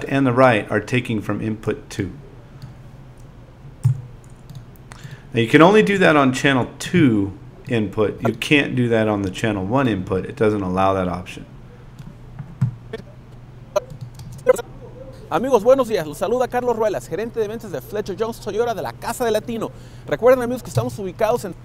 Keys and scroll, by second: 3.8 z, 6.9 a, 14.2 space.